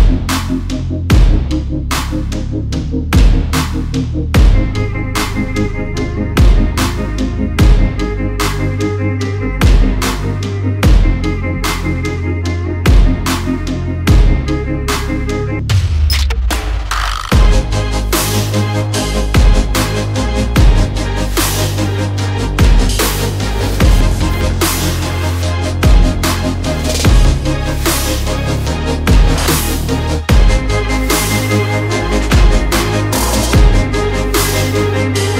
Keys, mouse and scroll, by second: 0.2 click, 1.2 shift+click, 4.7 ctrl+z, 4.8 click, 6.5 click, 6.8 shift+right click, 7.9 shift+Right, 8.5 shift+Left, 9.6 shift+Right, 10.0 shift+Left, 10.9 click, 11.7 shift+click, 12.0 shift+Left, 13.0 shift+click, 14.1-14.4 alt+scroll down 1, 14.6 alt+scroll up 1, 15.2 click, 15.5 double click, 15.9 alt+scroll up 1, 16.2 click, 18.0 shift+click, 18.4 right click, 18.9 click, 19.2 alt+scroll down 1, 19.5 alt+scroll up 1, 20.1 alt+click, 23.1 alt+scroll up 1, 24.2 click, 27.4-29.1 typing, 30.0 click, 30.8 6, 30.9 9, 31.6-32.1 alt+scroll down 1, 32.4 alt+scroll up 1, 33.1 click.